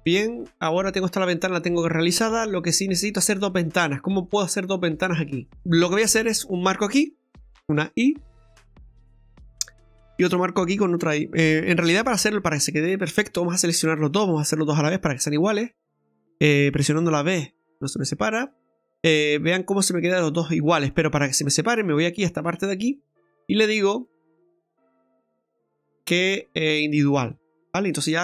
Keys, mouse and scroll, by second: 4.1 middle click, 6.3 right click, 7.7 right click, 7.7 i, 9.7 right click, 12.2 ctrl+z, 13.6 shift+right click, 14.5 i, 22.3 click, 23.7 click.